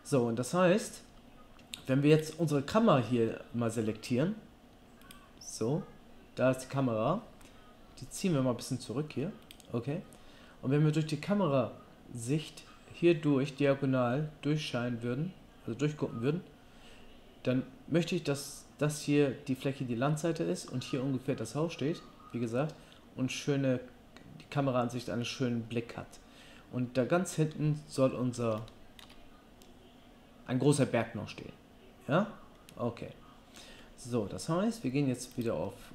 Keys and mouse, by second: 1.0 Tab, 2.2-5.1 drag, 8.0 g, 8.6 click, 8.6 middle click, 8.6 right click, 9.5-10.5 drag, 30.2-35.3 drag, 35.4 click, 35.6-35.9 right drag.